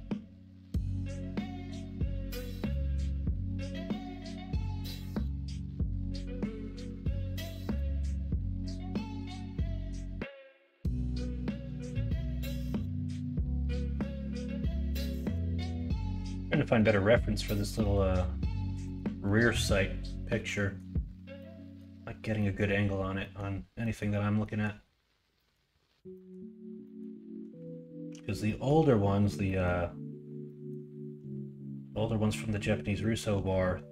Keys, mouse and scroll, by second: 0.1 middle click, 0.9 middle click, 1.2 Tab, 2.4 KP_1, 3.2 KP_3, 6.5 shift+middle click, 7.3 middle click.